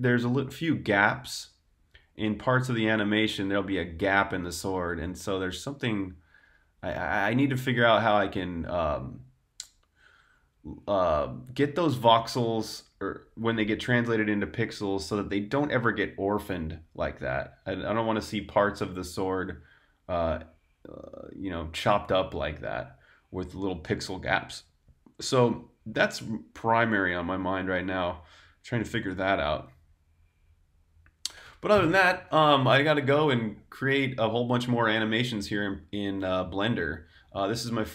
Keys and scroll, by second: 32.2 Tab, 32.6 super+q, 33.5 super+Tab.